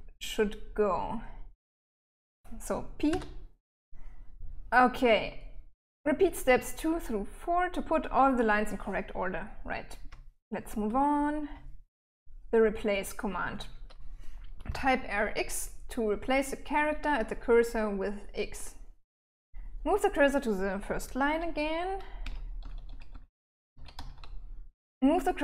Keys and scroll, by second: 2.5 p, 9.4-12.5 typing, 21.4-24.0 typing.